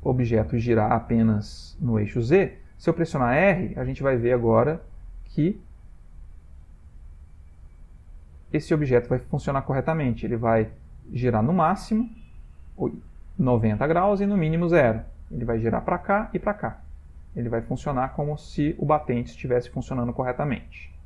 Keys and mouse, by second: 3.1 r, 5.9-6.2 middle click, 6.0 middle click, 6.1 middle click, 6.6 r, 12.3 middle click, 13.1 shift+middle click, 13.7 middle click, 14.2 r.